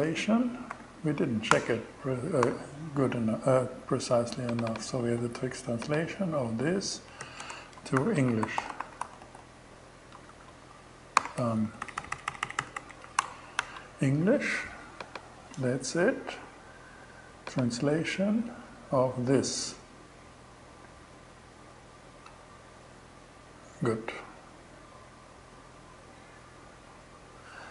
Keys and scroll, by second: 0.0-0.1 typing, 0.9 Return, 1.9 alt+5, 6.6-10.2 typing, 10.6 alt+shift+6, 11.1 alt+Left, 12.6 BackSpace, 13.0 shift+e.